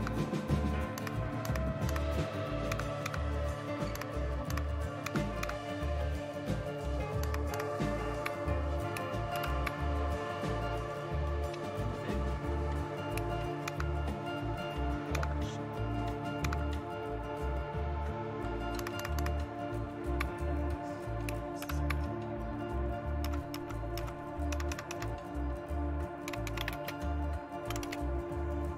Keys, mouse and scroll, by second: 0.0 super+Left, 0.9 super+Right, 1.4 super+Right, 1.8 super+Right, 2.7 super+Left, 3.0 super+Left, 3.9 super+Right, 4.5 super+Right, 5.0 super+Left, 5.4 super+Left, 7.2 super+Right, 7.5 super+Right, 9.3 super+Return, 13.7 super+Left, 15.1 super+Left, 16.5 super+Left, 18.8 super+Right, 19.0 super+Right, 19.2 super+Right, 21.6 super+Return, 23.2 Up, 23.5 Up, 23.9 Up, 24.5 Down, 24.7 Down, 24.9 Down, 26.3-28.7 typing.